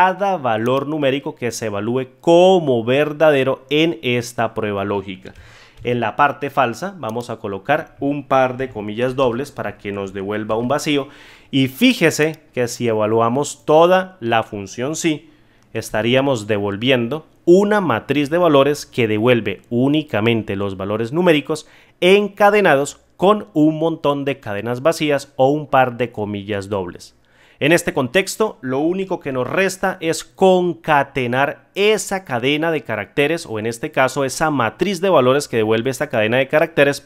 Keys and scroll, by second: 5.7 ctrl+z, 15.8 F9, 29.2 ctrl+z.